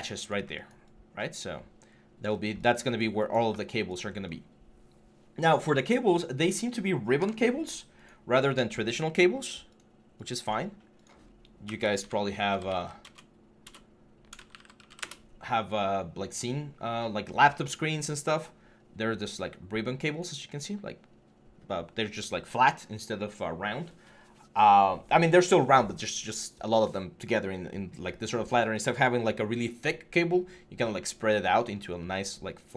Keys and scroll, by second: 11.4-12.6 typing, 13.9-14.7 typing, 15.0 Return.